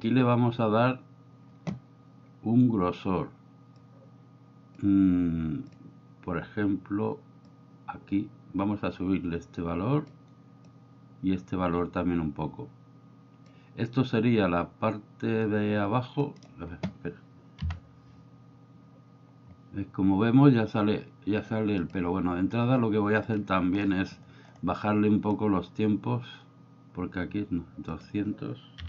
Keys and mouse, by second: 3.8-5.7 drag, 7.5-10.2 drag, 10.6-13.4 drag, 16.4 middle drag, 18.0 F12, 23.3 drag, 27.9-28.8 drag.